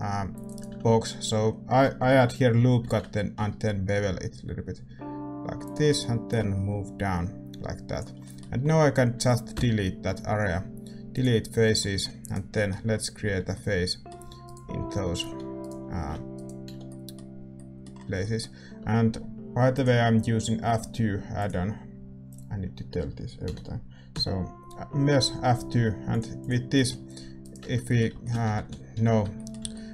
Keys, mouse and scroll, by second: 2.8 ctrl+b, 6.3-8.2 drag, 8.2-11.1 middle drag, 11.1 x, 11.7-15.6 middle drag, 12.2-18.6 right drag, 13.2 f, 15.6 f, 16.6 f, 16.8-21.5 middle drag, 18.6 Tab, 21.5 click, 26.7-29.9 middle drag, 27.4-29.3 right drag, 27.6 Tab, 28.5 ctrl+z, 29.6 a.